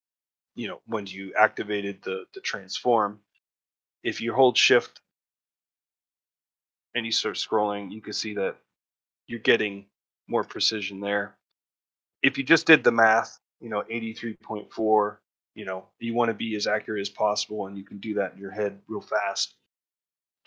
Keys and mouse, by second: 10.0 ctrl+middle click, 10.3 shift+middle click.